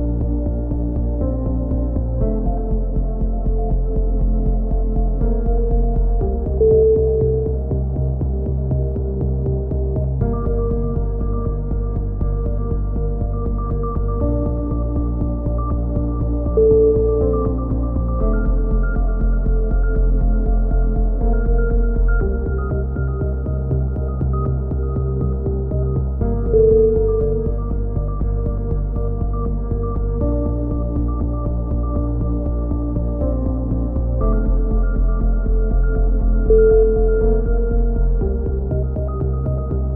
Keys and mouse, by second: 0.2 a, 0.5 z, 0.7 z, 1.1 middle click, 2.3-5.8 middle drag, 5.8 ctrl+r, 7.7 a, 8.4 click, 9.2 middle click, 10.0 g, 12.1 right click, 12.9 g, 14.1 click, 14.5 a, 14.9-16.7 middle drag, 16.7 click, 16.7 g, 18.9 a, 19.0 z, 19.1-20.2 drag, 20.0 z, 23.2-25.7 middle drag, 25.5 right click, 26.6 middle click, 29.7 right click, 30.5 click, 34.9 middle click, 35.2 a, 36.4-38.2 middle drag, 38.2-39.6 right drag, 39.1 x.